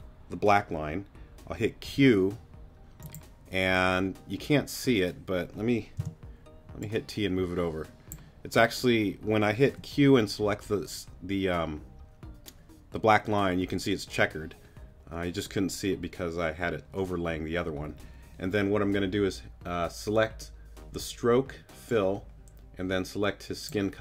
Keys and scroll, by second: 1.9 p, 6.0 t, 9.6 q.